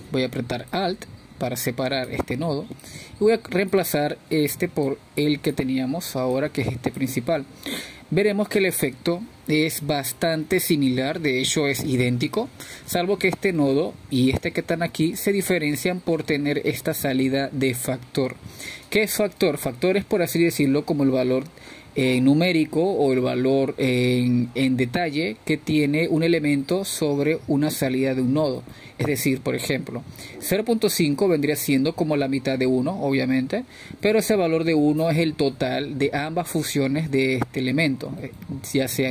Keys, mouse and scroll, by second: 4.0 alt+click, 6.1-7.0 drag, 8.2 click, 9.6 click, 17.4-26.2 drag.